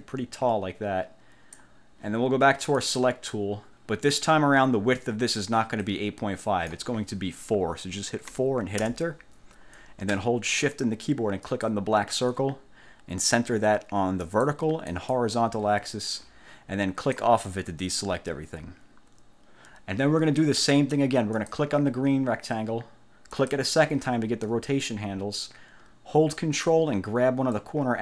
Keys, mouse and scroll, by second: 2.9 click, 6.0 click, 8.4 4, 8.9 Return, 11.6 shift+click, 14.4 click, 15.0 click, 17.1 click, 21.4 click, 23.4 click, 27.6-28.0 ctrl+drag.